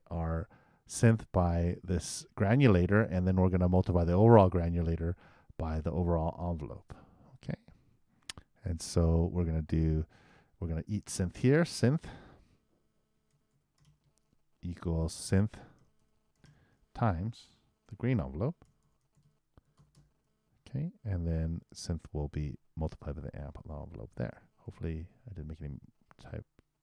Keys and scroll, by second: 17.3 shift+h, 17.8 shift+8, 18.6 shift+g, 24.6 super+Return.